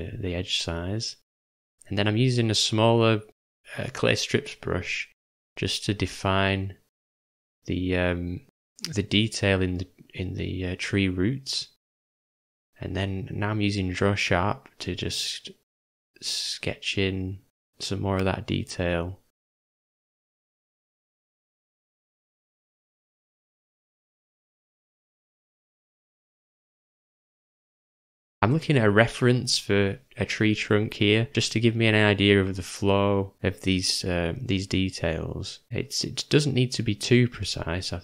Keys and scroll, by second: 4.5 j, 7.8 [, 8.0 [, 8.1 [, 18.4 ], 18.7 ], 24.9 [, 25.1 [, 29.3 m, 33.3 [.